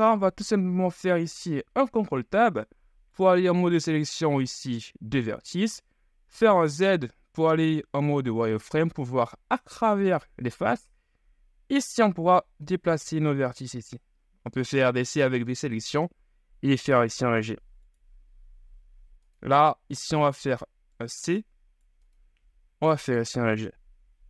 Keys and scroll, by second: 1.4 ctrl+Tab, 6.5 z, 12.9 ctrl+z, 13.8 c, 15.9 g, 20.5 c, 22.4 g.